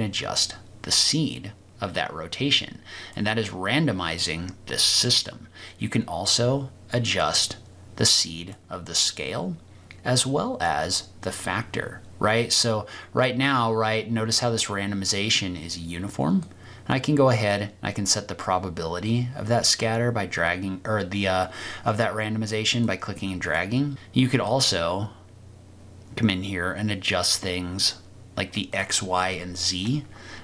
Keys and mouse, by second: 7.3-8.6 drag, 16.5-22.9 drag, 23.4 click, 24.4-28.6 drag, 28.7-30.4 drag.